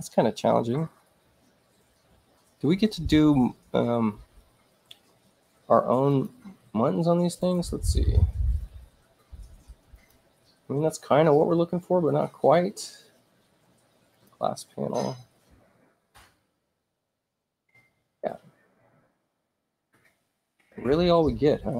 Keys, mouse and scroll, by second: 6.1 click, 7.4 click, 9.9 click, 14.1 click, 18.7 click.